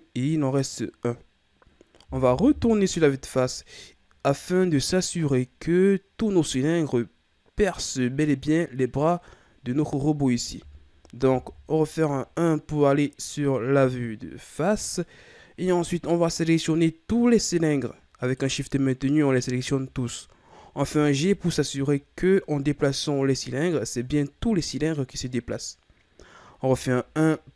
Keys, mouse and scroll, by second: 2.4 KP_1, 3.9-4.4 scroll down 5, 4.4-4.9 ctrl+scroll up 9, 5.2-8.3 scroll up 4, 8.3 scroll down 4, 8.6-9.3 middle drag, 9.3-10.0 scroll up 5, 11.4 KP_1, 15.7-16.1 scroll down 1, 16.1-17.2 middle drag, 17.2 right click, 18.2 shift+right click, 19.4 shift+right click, 20.8 g, 26.7 KP_1.